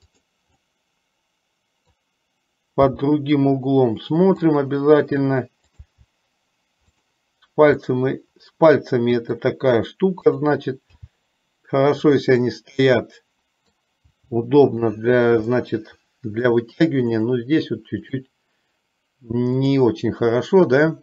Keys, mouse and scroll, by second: 0.7-2.3 middle drag, 0.7 e, 2.9 g, 5.8 click, 6.3 g, 8.0-9.5 middle drag, 11.2 g, 12.5-14.0 middle drag, 15.8 middle click, 17.3 click.